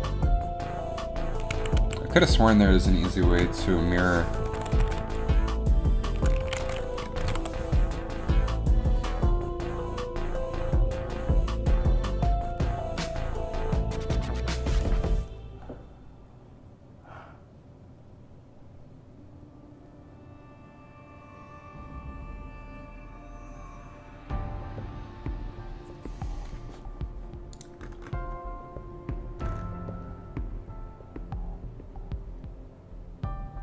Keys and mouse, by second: 1.1 ctrl+z, 1.7 a, 1.9 a, 3.5 space, 4.8 r, 7.1 ctrl+z, 7.1 a.